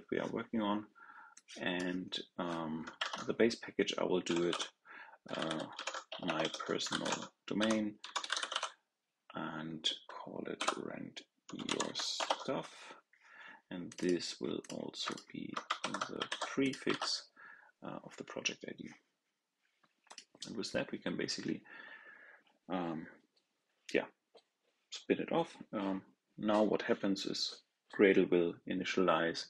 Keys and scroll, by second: 2.9 super+a, 16.2 super+c, 16.8 super+v.